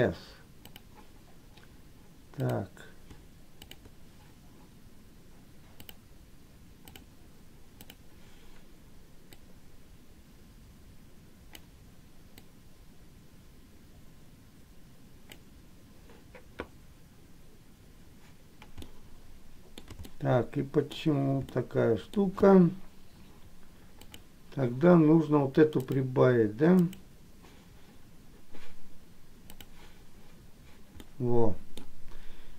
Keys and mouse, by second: 0.9 click, 2.6 click, 6.0-7.2 drag, 9.6-11.6 drag, 12.5-15.7 drag, 19.1 middle click, 20.2 shift+middle click, 21.7 middle click, 24.2 click, 26.1-27.2 drag, 29.7 click, 31.2 middle click.